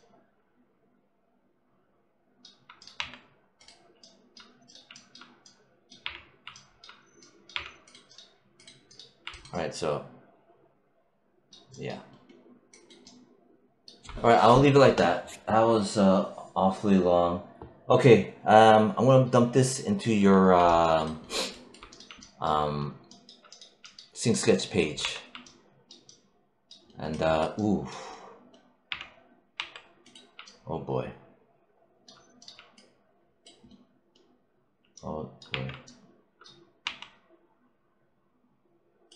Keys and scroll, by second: 2.8 1, 7.4 3, 24.9 1, 28.7 3, 35.3 3, 36.7 1.